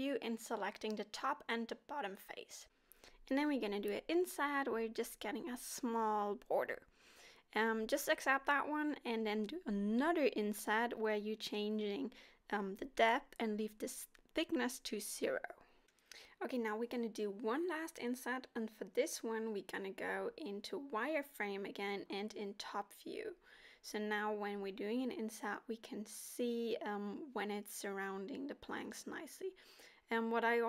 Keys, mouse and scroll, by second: 0.5 middle click, 1.0 shift+click, 1.6 middle click, 2.6 i, 8.1 middle click, 9.4 i, 10.5 click, 12.3 middle click, 12.9 scroll up 3, 19.5 z, 20.6 KP_7, 23.5 i, 27.8-28.6 scroll down 1, 28.6 middle click, 29.5 scroll down 2, 30.2 a.